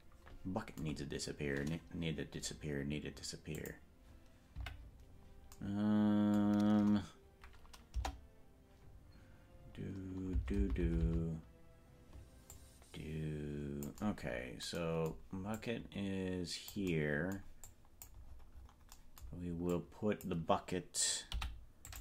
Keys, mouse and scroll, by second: 3.7 click, 4.5 KP_Decimal, 7.9 KP_0, 10.5 Right, 10.7 Right, 10.9 Right, 11.3 Right, 12.6-14.0 drag, 15.6-16.9 drag, 17.7 click, 18.3-18.9 scroll down 9, 19.8 click, 21.3 i.